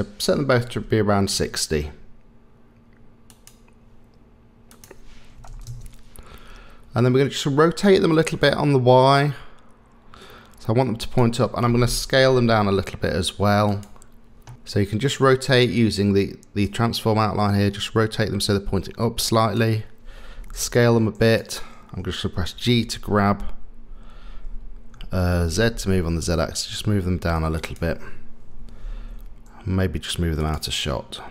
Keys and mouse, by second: 4.9 click, 8.4-11.2 drag, 12.3 s, 16.6-19.6 drag, 20.6 s, 22.6 g, 28.5 g.